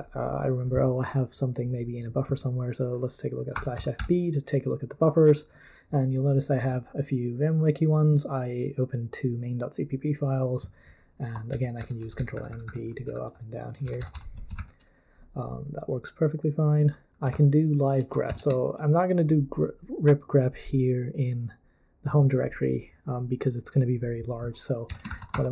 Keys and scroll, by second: 3.3-4.5 typing, 11.5 ctrl+n, 11.8 ctrl+n, 12.0 ctrl+n, 12.2 ctrl+n, 12.3 ctrl+p, 12.5 ctrl+p, 12.7 ctrl+p, 13.1 ctrl+p, 13.4 ctrl+p, 13.8 ctrl+n, 14.0 ctrl+n, 14.1 ctrl+n, 14.6 super+l, 18.3 ctrl+c, 24.8-25.5 typing.